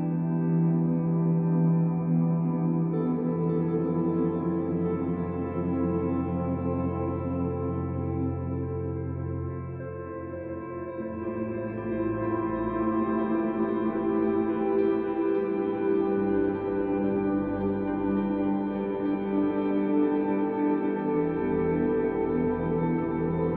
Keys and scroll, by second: 23.5 z.